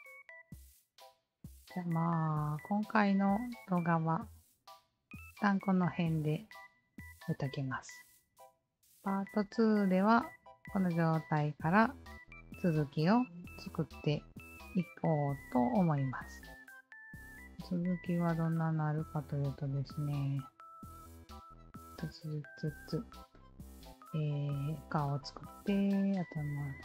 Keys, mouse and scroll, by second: 0.0-5.1 drag, 0.0 alt+middle click, 5.6-8.4 alt+drag, 10.8-11.4 alt+drag, 12.0 ctrl+s, 12.7-14.7 alt+drag, 17.0 alt+click, 18.4 alt+click, 20.2-21.1 scroll down 3, 21.1-24.0 scroll down 2, 24.0-26.2 scroll down 7.